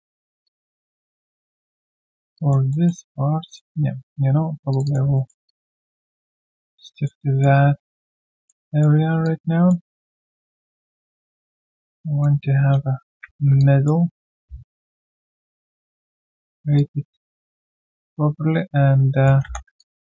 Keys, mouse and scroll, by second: 0.4 alt+click, 2.3 alt+click, 2.7 alt+middle click, 3.6 double click, 4.7 shift+click, 4.8 shift+double click, 5.1 alt+middle click, 5.4 alt+click, 6.4 shift+click, 6.9 alt+middle click, 7.2 alt+click, 8.0 shift+double click, 8.3 alt+middle click, 8.6 alt+click, 9.2 alt+click, 9.9 alt+middle click, 10.1 alt+click, 12.0 alt+middle click, 13.1 ctrl+b, 13.6 alt+click, 16.1 alt+click, 16.4 alt+middle click, 16.7 alt+click, 19.7 3, 19.8 alt+click.